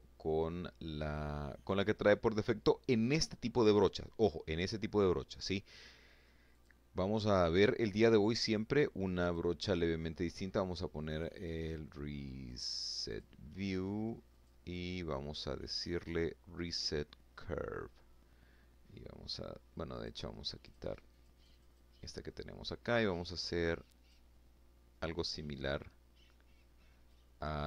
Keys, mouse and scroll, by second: 3.4 middle click, 4.3 middle click, 5.0 click, 7.7 click, 9.6 click, 11.0 click, 11.6 click, 12.8 click, 15.2 click, 18.5 click, 19.2 click, 19.7 click, 21.5-22.8 drag, 25.6-26.8 drag, 27.0-27.6 middle drag.